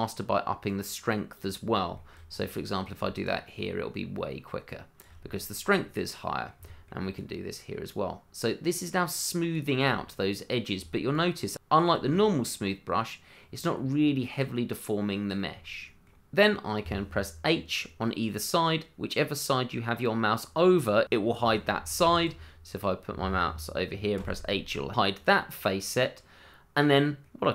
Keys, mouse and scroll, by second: 0.6 click, 1.6-1.9 scroll down 1, 1.9 shift+middle click, 2.3-2.6 scroll up 1, 2.6 middle click, 3.2 shift+click, 3.3 click, 3.3 shift+click, 5.2-6.0 scroll down 1, 6.0 middle click, 7.1 click, 9.9-10.2 scroll down 1, 10.2 middle click, 11.1 shift+click, 11.2 click, 11.2 shift+click, 12.4-13.2 scroll up 1, 13.4 scroll down 1, 13.6 middle click, 15.0 shift+middle click, 15.7 middle click, 15.8 shift+middle click, 16.1 middle click, 21.0 h, 22.0 ctrl+z, 24.1 h, 25.4 middle click.